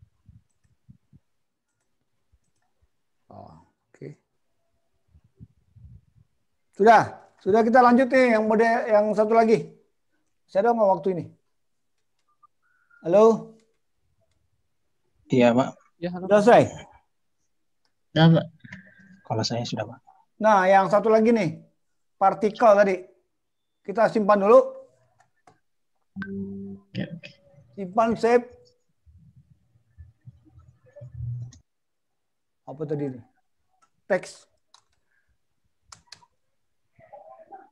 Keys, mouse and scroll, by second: 1.7 click, 1.8 click, 2.6 click, 4.0 scroll down 1, 4.9 scroll down 1.